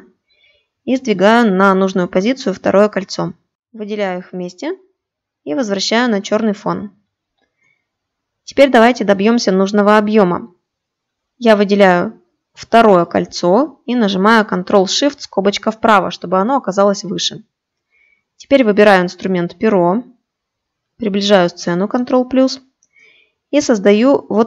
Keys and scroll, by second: 13.8 ctrl+shift+].